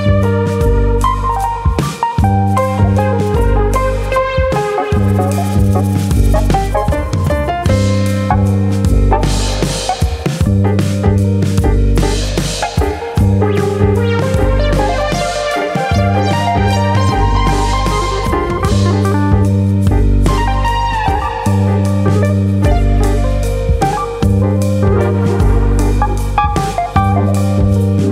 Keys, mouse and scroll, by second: 0.6 alt+click, 1.2 click, 3.2 alt+click, 3.4 middle click, 4.1 click, 4.9 middle click, 5.7 alt+click, 5.9 middle click, 6.6 click, 7.9 alt+click, 9.5 alt+click, 10.3 click, 11.2 shift+middle click, 11.4 middle click, 11.8 alt+click, 12.4 click, 13.6 middle click, 14.3 alt+click, 14.9 click, 16.0 middle click, 16.4 shift+middle click, 16.7 middle click, 17.4 alt+click, 18.3 click, 19.4 middle click, 19.9 middle click, 20.7 middle click, 21.6 alt+click, 22.0 right click, 23.3 middle click, 24.8 click, 25.5 click.